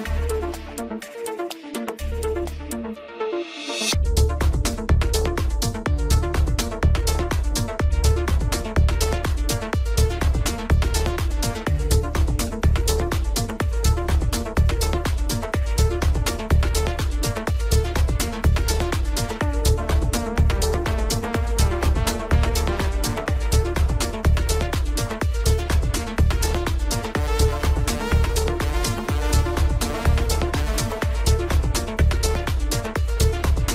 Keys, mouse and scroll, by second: 0.3-1.2 shift+middle drag, 1.2 Tab, 1.8-2.8 middle drag, 2.8-4.5 scroll down 1, 4.5 click, 9.6 scroll down 1, 9.9-11.8 middle drag, 11.8-14.4 drag, 14.4 KP_7, 15.4-16.3 shift+middle drag, 16.3-16.6 scroll up 1, 17.6 r, 25.8-28.9 drag, 29.8 scroll up 1, 30.7 Tab.